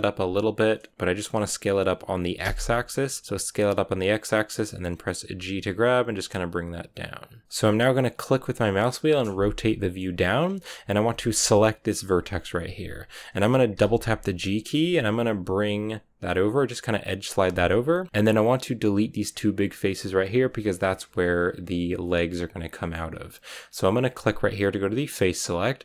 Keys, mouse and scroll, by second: 5.3 g, 7.4 KP_1, 8.4-9.9 middle drag, 9.9-10.6 scroll up 4, 11.4-13.6 right drag, 13.7 g, 18.1-19.6 scroll up 1, 19.6-20.1 scroll up 1, 22.6-24.9 middle drag, 24.9-25.8 drag.